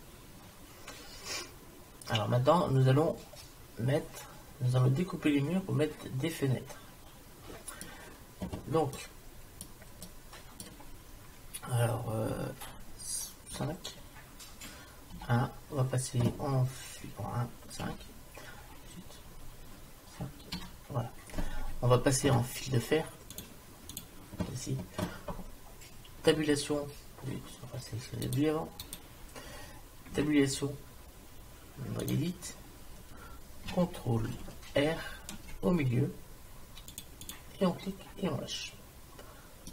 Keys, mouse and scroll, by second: 9.0-12.0 middle drag, 13.5 KP_5, 15.2 KP_1, 17.9 KP_5, 20.6 KP_5, 26.4 Tab, 29.0-30.7 drag, 30.2 Tab, 34.8 ctrl+r.